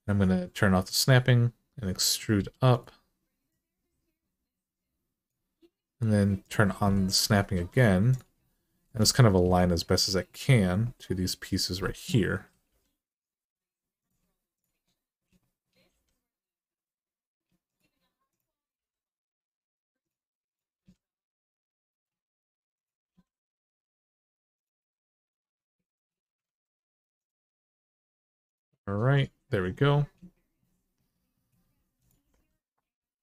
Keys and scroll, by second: 2.2 e, 7.3 1, 12.5 g, 15.7 g, 18.5 g, 20.5 g, 22.8 g, 26.2 ctrl+z, 27.2 g, 32.1 g.